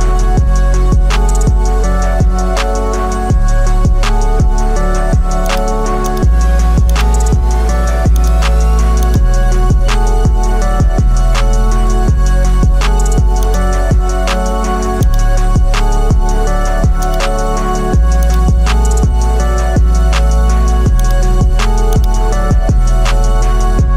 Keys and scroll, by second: 4.5 ctrl+j, 13.9 0, 17.6 0, 21.3 0.